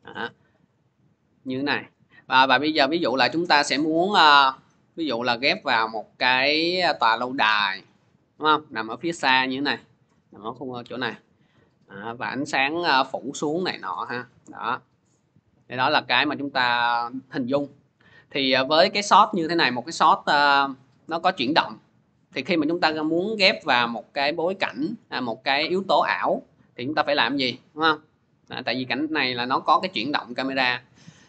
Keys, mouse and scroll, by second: 2.0 click, 2.6 scroll down 1, 5.1-7.0 scroll up 1, 7.0 scroll, 7.5 scroll, 8.1 scroll, 11.4 scroll, 19.4-28.8 drag.